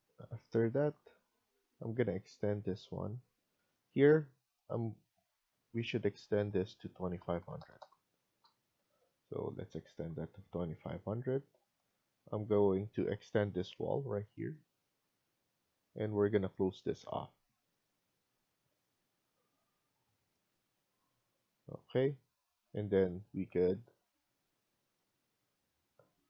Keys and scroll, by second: 8.1-8.8 typing, 8.8 Escape, 12.6 Escape, 13.0 Escape, 17.3 Escape, 20.4 Escape.